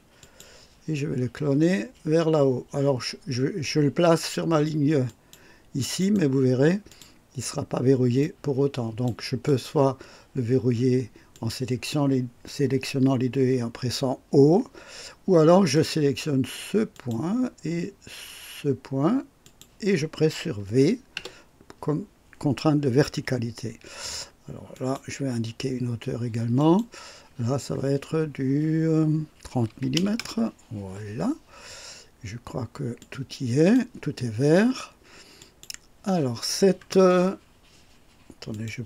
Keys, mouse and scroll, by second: 0.1 click, 5.0 click, 5.9 right click, 6.8 click, 8.1-9.2 drag, 9.4 click, 11.3 click, 15.7 click, 16.9 click, 19.4 click, 21.1 v, 24.7 click, 26.5 click, 29.6 KP_3, 29.9 KP_0, 30.1 Return, 32.9-33.9 drag, 35.3 click, 38.4 click.